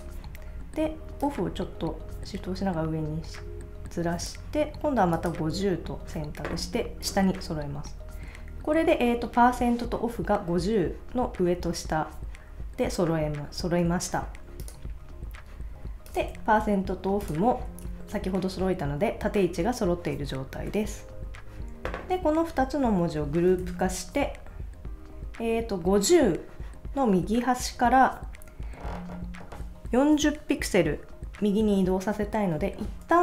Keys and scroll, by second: 23.5 super+c.